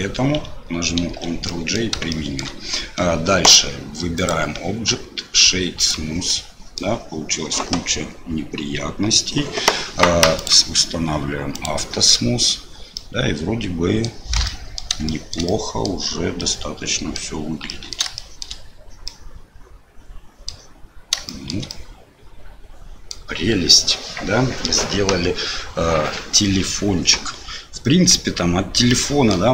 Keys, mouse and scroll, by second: 1.0 ctrl+j, 1.4 middle click, 2.1 shift+middle click, 4.2-5.9 right drag, 6.2 middle click, 10.4 click, 11.5 click, 12.1 middle click, 12.9-14.0 middle drag, 14.4 middle click, 15.0 shift+middle click, 15.4 middle click, 16.4 middle click, 17.6 middle click, 18.1 shift+middle click, 19.0-20.5 middle drag, 21.2 shift+middle click, 21.7-23.1 middle drag, 28.1 KP_7, 28.9 click.